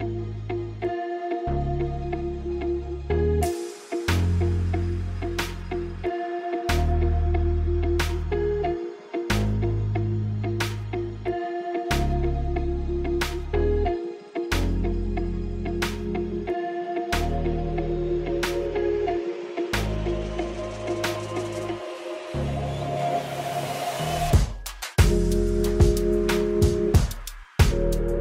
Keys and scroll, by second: 5.4-7.5 typing, 14.9 g, 15.2 KP_1.